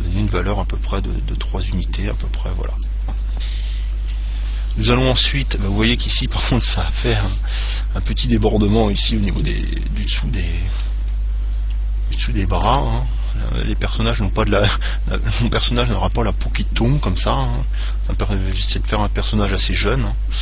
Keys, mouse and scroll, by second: 3.1 click, 9.6-11.3 middle drag, 11.8 KP_1, 12.9 KP_3.